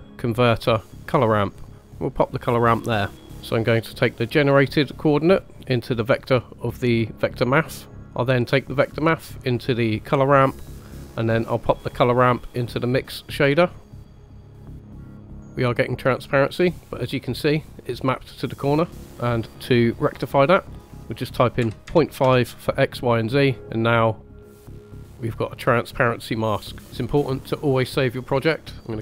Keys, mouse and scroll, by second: 2.9 scroll down 2, 3.2 ctrl+right click, 4.1-6.3 drag, 7.9 click, 8.3-9.5 drag, 10.5-10.9 middle drag, 11.7-13.7 drag, 13.8 scroll down 4, 13.9 scroll up 2, 14.3 click, 14.7 scroll down 1, 15.4 click, 16.8 scroll down 3, 20.6-22.1 drag, 23.6-24.1 drag, 24.3 click, 25.1 click, 26.8 middle click, 26.8 scroll down 2, 27.7-28.9 drag.